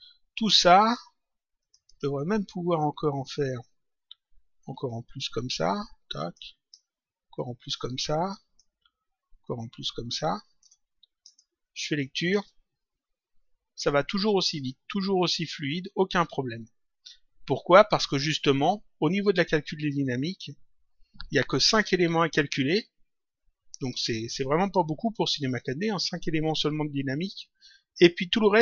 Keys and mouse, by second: 1.6 shift+click, 4.8 ctrl+click, 7.2 ctrl+click, 9.4 ctrl+click, 11.2 click, 23.8 click, 25.3 click.